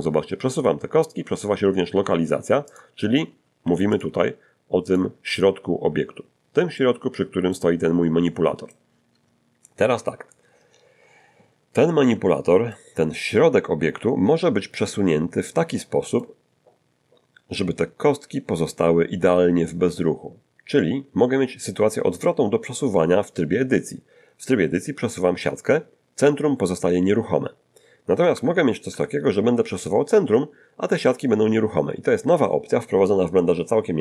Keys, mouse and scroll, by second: 2.7 Escape, 2.7 click, 3.6 g, 4.0 click, 4.9 click, 6.8 middle click, 11.9-12.9 middle drag, 14.4 shift+middle click, 15.7 middle click, 23.1 Tab, 27.0 g, 28.3 Escape, 28.9 Tab.